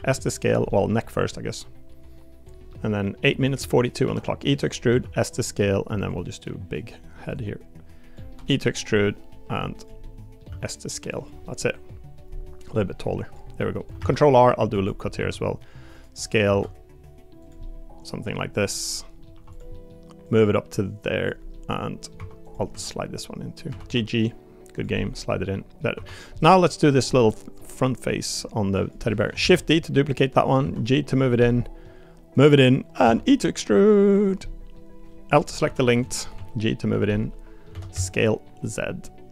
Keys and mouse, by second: 0.7 middle click, 1.3-2.5 drag, 2.7 middle click, 3.5 middle click, 4.9 s, 6.4 middle click, 7.4 click, 8.3 e, 10.0 middle click, 10.5 s, 11.4 middle click, 12.7 click, 13.6 middle click, 14.0 ctrl+r, 15.1 s, 16.5 s, 17.6 middle click, 19.2 middle click, 19.3 3, 19.5 click, 19.7 middle click, 20.3-21.3 drag, 21.5 middle click, 22.2 2, 22.7 g, 24.9 middle click, 25.5 middle click, 25.9 3, 26.1 click, 26.3 middle click, 27.1 middle click, 28.4 click, 29.1 middle click, 29.4 shift+d, 29.8 middle click, 30.6 g, 31.4 middle click, 32.4 click, 33.0 e, 34.4 middle click, 35.4 click, 35.7 l, 36.0 middle click, 36.3 g, 37.1 middle click, 37.7 s.